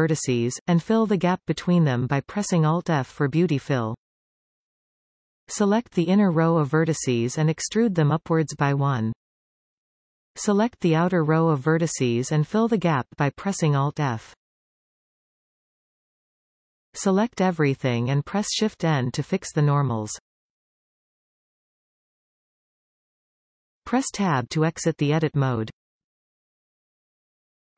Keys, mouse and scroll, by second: 0.0 alt+shift+click, 1.6 alt+f, 4.9 alt+a, 5.6 alt+shift+click, 6.7 e, 11.1 alt+shift+click, 13.6 alt+f, 16.9 a, 20.8 shift+n, 25.7 Tab, 26.4 scroll down 2, 26.9-27.7 middle drag.